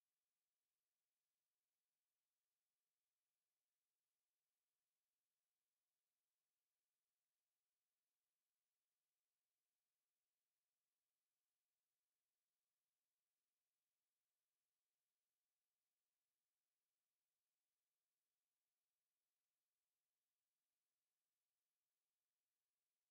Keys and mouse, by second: 18.0 alt+click, 19.1 right click, 19.7 click, 20.5 w.